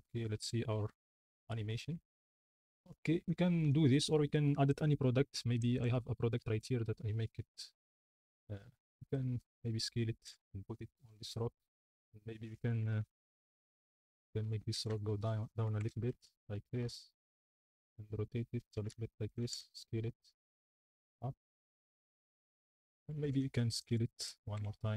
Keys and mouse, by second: 0.2 space, 2.3 space, 3.7 ctrl+s, 7.8 click, 9.1 click, 9.7 s, 10.2 g, 10.4 z, 13.0 KP_Decimal, 14.1-16.3 typing, 15.2 click, 17.4 g, 17.6 z, 17.8 r, 18.9 g, 18.9 z, 19.4 s, 19.6 z, 20.9 g, 21.3 z, 22.0 z, 22.0 s, 23.0 middle click, 23.2-24.9 typing.